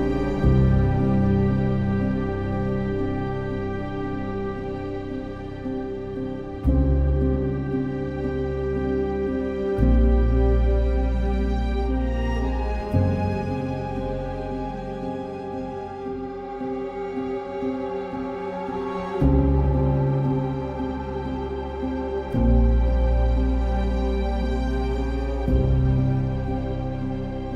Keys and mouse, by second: 0.9 ctrl+r, 1.5 1, 1.8 click, 2.9 z, 4.2 ctrl+r, 4.4 ctrl+click, 4.7 1, 5.0 click, 5.6 shift+s, 7.6 Tab, 8.1 Tab, 8.8 3, 10.0 x, 10.8 Tab, 11.2 Tab, 11.5 click, 12.1 ctrl+KP_Add, 12.2 ctrl+KP_Add, 12.9 p, 13.6 Tab, 15.4-16.7 drag, 18.9 click, 19.5 click, 20.0 Tab, 23.1 3, 24.4 shift+d, 25.0 click, 25.9 s.